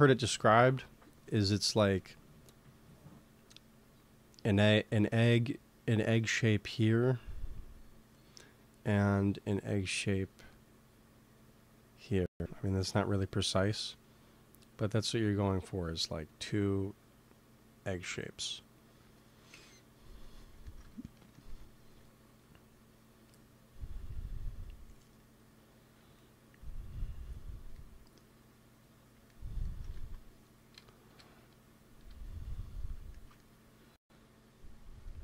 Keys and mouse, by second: 0.0 KP_3, 4.2 d, 4.7 d, 4.8-6.7 drag, 4.8-9.3 d, 9.5-11.2 drag, 12.8 d, 12.9 d, 13.5 n, 14.7-17.3 drag, 17.9-21.0 drag, 19.4 n, 21.8 f, 22.0-30.6 drag, 29.8 ctrl+s, 31.0 KP_1, 31.9 KP_3, 34.8 f.